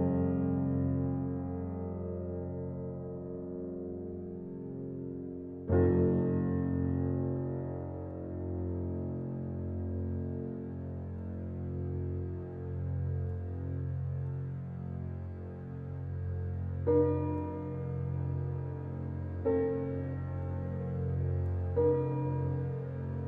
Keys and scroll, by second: 3.4 Left, 6.0 Left, 7.7 Left, 9.1 Left, 10.9 Left, 13.8 Left, 16.7 Left, 18.5 Left, 20.1 Left.